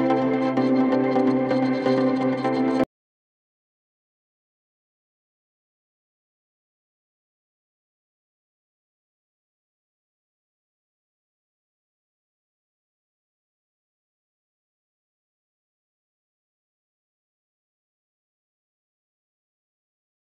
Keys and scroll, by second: 0.5 F9, 5.0 Escape, 11.7 ctrl+r, 13.5 ctrl+z, 14.4 ctrl+z, 17.1 F3, 17.4 Escape, 18.8 shift+F2, 19.8 F9.